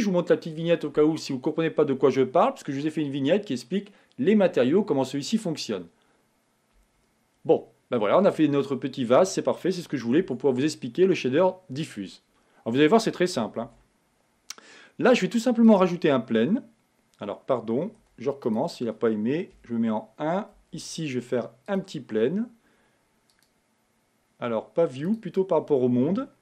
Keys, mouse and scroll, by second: 7.8 middle click, 8.5 scroll down 2, 9.5-10.5 middle drag, 10.5 Tab, 14.3 shift+a, 19.8 KP_1, 21.1 shift+a, 23.6-26.4 drag.